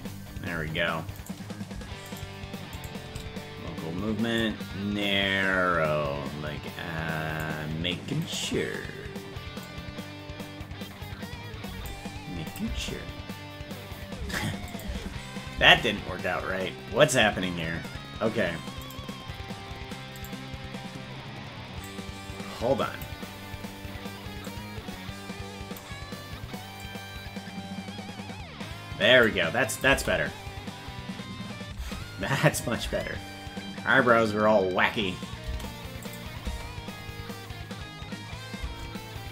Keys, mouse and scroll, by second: 1.3 right click, 2.8-4.4 shift+right drag, 4.4 click, 6.2-7.8 drag, 8.5 right click, 9.6 click, 12.7 click, 12.7 space, 14.7 click, 14.9 space, 19.0 right click, 19.0 space, 21.9-25.3 drag, 29.9 click, 29.9 space, 32.5 click, 32.5 space, 32.9 space, 36.1 click, 36.1 space.